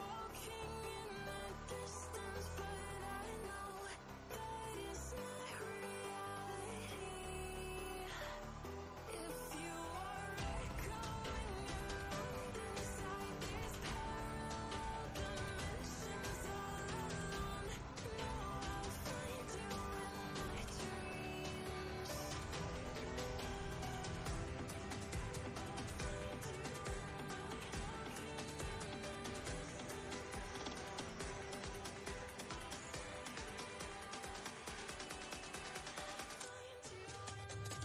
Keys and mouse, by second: 10.0 click, 11.4 ctrl+space, 11.8-12.4 ctrl+click, 11.9 ctrl+space, 12.6-13.6 drag, 17.2 click, 20.4 ctrl+z, 22.1-24.7 drag, 25.8 ctrl+alt+shift+Right, 26.7 ctrl+alt+shift+Left, 27.5 ctrl+alt+shift+Right, 29.4-30.0 drag, 30.1 ctrl+space, 30.2-31.5 ctrl+click, 30.8 ctrl+space, 31.2 ctrl+space.